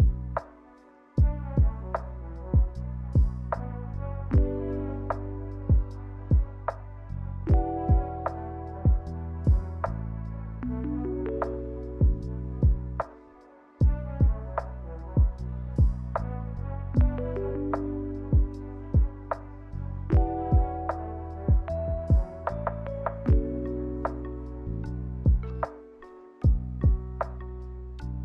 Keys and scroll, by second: 0.0 a, 3.2 ctrl+c, 3.4 ctrl+v, 6.2 ctrl+z, 6.7 z, 12.6 n, 14.6 m, 18.2 a, 20.6 ctrl+h, 22.7-23.6 typing.